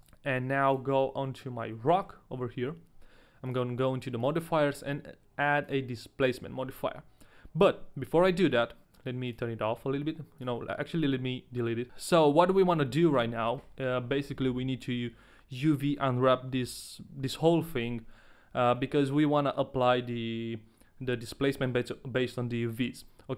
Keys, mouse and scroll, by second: 0.0 right click, 0.5 right click, 0.5 a, 1.2 middle click, 2.1 right click, 2.1 middle click, 2.1 a, 3.4 click, 4.2 click, 9.8 click, 10.4 click, 13.3-15.3 scroll down 2, 13.7 shift+middle click, 18.8 middle click, 20.0-20.4 scroll up 1.